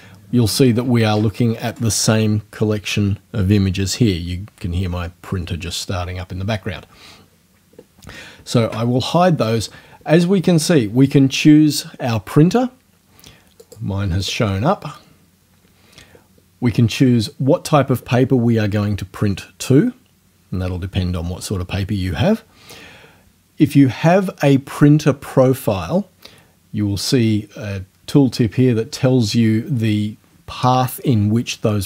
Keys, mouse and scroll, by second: 8.6 ctrl+f, 13.6 click, 14.2 click.